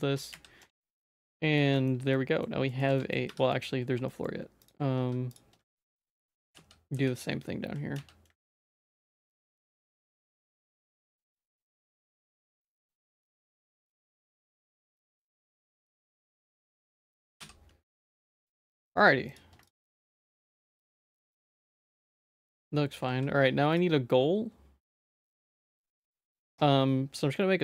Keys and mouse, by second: 0.3 f, 0.6 Tab, 1.2 middle click, 1.7 shift+middle click, 2.1 middle click, 2.7 shift+middle click, 2.9 Tab, 3.0 middle click, 3.2 2, 3.5 middle click, 4.0 shift+middle click, 5.0 1, 5.6 shift+middle click, 6.3 e, 9.5 click, 9.8 shift+middle click, 10.1 e, 10.7 shift+click, 11.5 shift+middle click, 11.9 a, 12.3 middle click, 12.9 2, 14.5 shift+click, 14.9 f, 15.2 Tab, 15.5 z, 17.4 h, 18.0 middle click, 18.4 shift+middle click, 19.3 click, 20.1 ctrl+s, 20.3 middle click, 20.8 shift+middle click, 21.0 middle click, 22.0 middle click, 22.7 middle click, 23.8-25.5 drag, 25.8 shift+a.